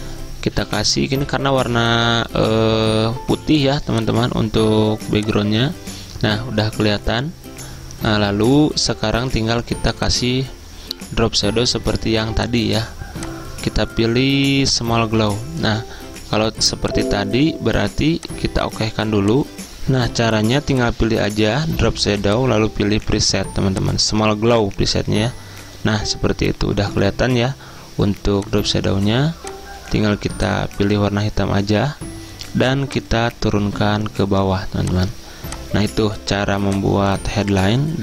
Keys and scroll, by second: 19.5 ctrl+z.